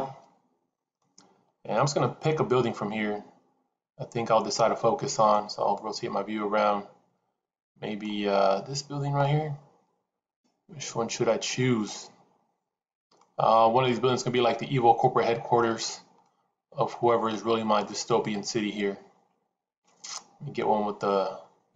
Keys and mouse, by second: 0.0 click, 1.0-5.3 middle drag, 5.6-8.0 middle drag, 9.1-13.1 middle drag, 14.2-15.6 middle drag, 16.2-21.7 middle drag.